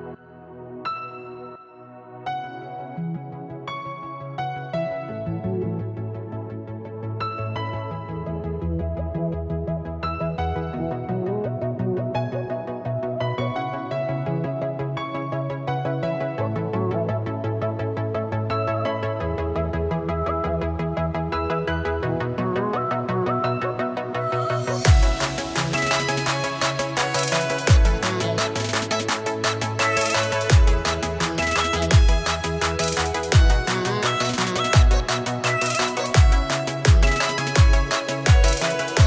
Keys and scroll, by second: 0.3 -, 2.4 -, 6.7 space, 7.9 +, 8.0 space, 8.5 z, 11.1 space, 11.9 space, 14.4 space, 15.1 space, 18.0 space, 20.2 space, 21.5 space, 23.7 -, 23.8 space, 26.1 space, 27.5-33.3 typing, 36.9-39.0 typing.